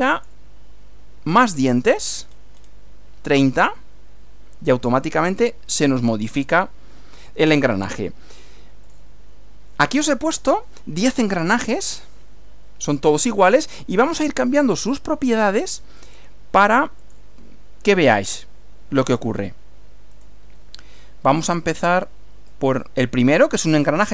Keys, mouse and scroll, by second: 0.2 click, 1.6 scroll up 2, 2.0 scroll down 2, 3.6 click, 8.8 click, 12.2-14.2 middle drag, 16.0 click, 17.0 click, 18.3 click, 20.1 click, 22.5-24.1 drag.